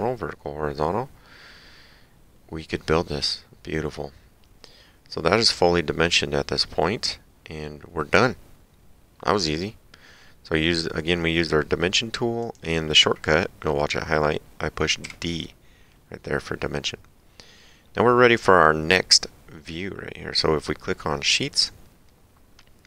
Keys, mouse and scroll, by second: 12.4 click, 15.1 d, 21.5 click.